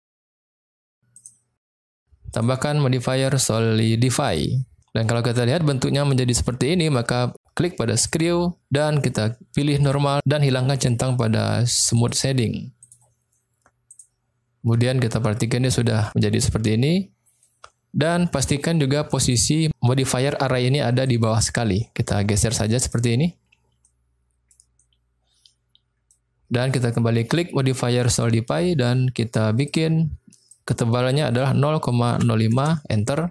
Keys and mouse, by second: 2.5-4.4 drag, 6.0-6.8 middle drag, 8.1 click, 9.8 click, 12.0 click, 12.8 click, 13.9 click, 14.7-15.3 middle drag, 15.5-15.9 middle drag, 16.1-17.4 middle drag, 18.3 click, 21.0-22.9 drag, 23.7-24.4 middle drag, 24.8-26.0 middle drag, 28.2 click, 29.7-32.9 drag.